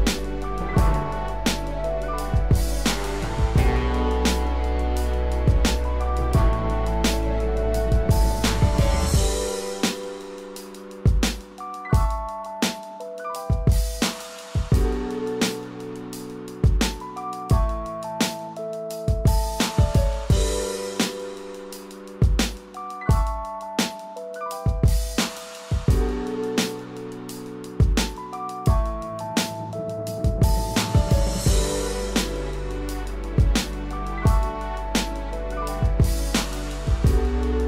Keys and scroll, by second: 9.6 ctrl+=, 10.1 ctrl+=, 20.8 ctrl+=, 30.6 ctrl+=.